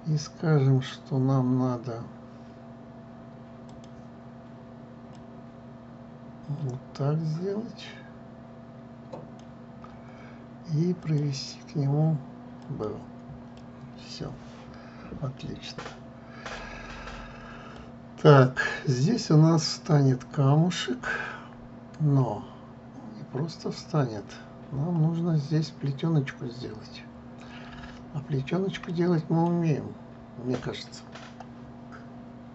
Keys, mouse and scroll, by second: 4.4 click, 5.8 click, 11.7-14.3 drag, 14.3-17.3 middle drag, 18.4-23.0 middle drag, 24.9 middle click, 28.5-29.0 scroll, 29.6 middle click, 30.2 scroll.